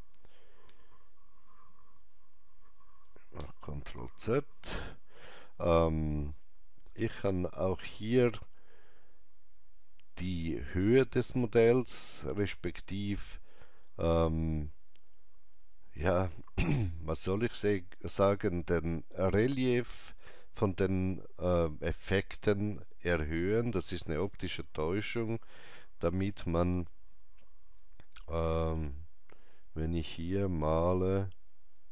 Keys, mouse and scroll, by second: 0.7 ctrl+z, 3.4 ctrl+z, 5.9 ctrl+z, 5.9 scroll down 1, 28.2-31.9 drag, 28.2 scroll down 1.